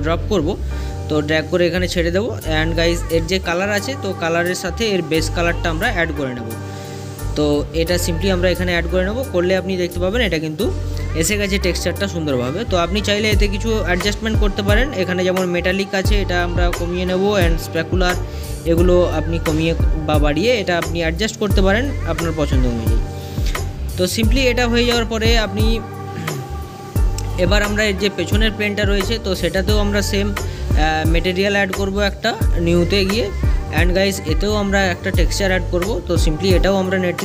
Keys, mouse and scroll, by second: 28.4-37.2 drag.